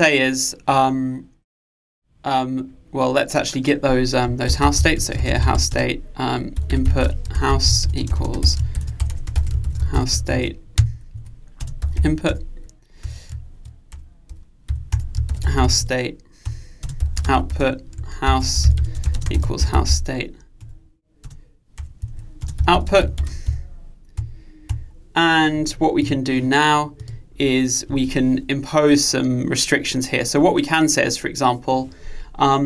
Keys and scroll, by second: 10.9 Return, 16.5 Return, 20.8 Return.